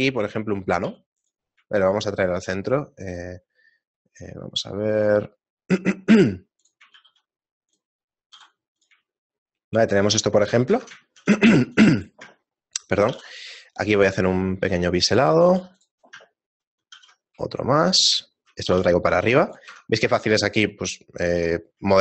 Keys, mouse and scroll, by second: 0.2 middle click, 0.9 s, 7.0 shift+s, 8.4 s, 9.1 shift+middle click, 10.7 Tab, 11.0 shift+middle click, 11.4 ctrl+r, 13.1 ctrl+b, 15.5 ctrl+r, 17.0 ctrl+b, 18.3 shift+middle click, 18.9 g, 19.7 Tab, 20.2 shift+middle click, 21.0 shift+middle click.